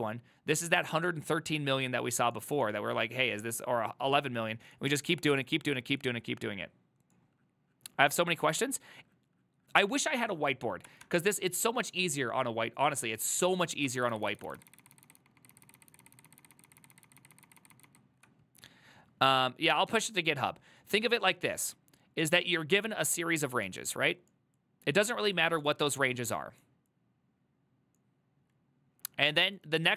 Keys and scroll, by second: 11.2 alt+=, 14.2 ctrl+z, 14.3-15.1 ctrl+z.